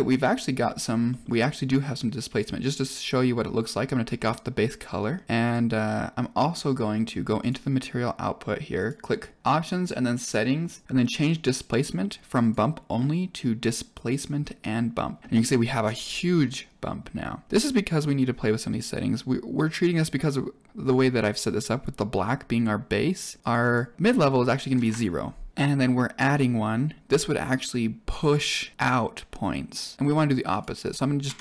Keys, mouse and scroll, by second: 0.5 scroll up 4, 1.0 middle click, 2.1 drag, 3.0 scroll down 3, 4.7 middle click, 5.4 click, 7.3 click, 8.7 click, 9.4 click, 10.8 click, 12.3 click, 20.7 click, 23.2 click, 23.5-25.5 drag, 25.5 middle click, 26.2 click, 30.4-31.4 drag.